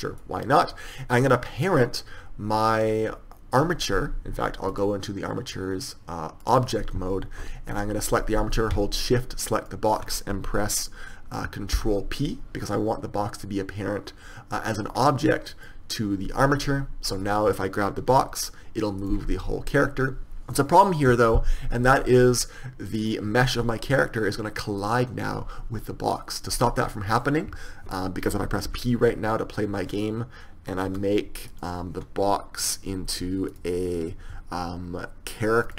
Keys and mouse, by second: 0.6-2.1 middle drag, 2.1-4.6 right drag, 6.5 right click, 18.4 g, 18.6-29.4 right drag, 31.2 p, 31.9 right click.